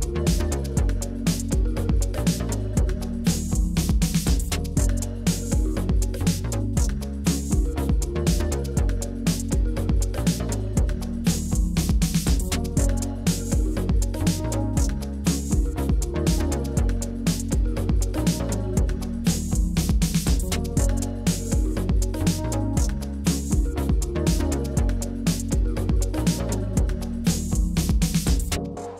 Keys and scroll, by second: 0.7-1.8 typing, 5.1 4, 6.3 shift+Up, 6.4 shift+Up, 6.6 shift+Down, 6.8 Left, 7.0 Left, 7.0 Left, 7.1 Left, 7.3 Down, 8.3 Down, 9.0 Up, 9.1 Up, 10.2 Down, 10.3 Down, 24.1 Down.